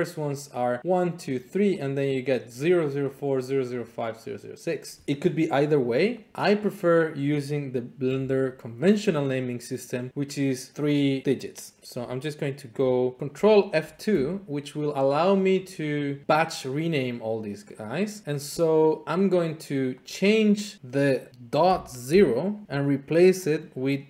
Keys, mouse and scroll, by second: 0.4 click, 1.0 click, 1.3 click, 1.7 click, 3.1 click, 3.8 click, 6.3 click, 8.5 shift+click, 8.9 shift+click, 13.8 ctrl+F2, 15.5 click, 20.0 click, 22.0 typing, 22.6 click, 23.5 click.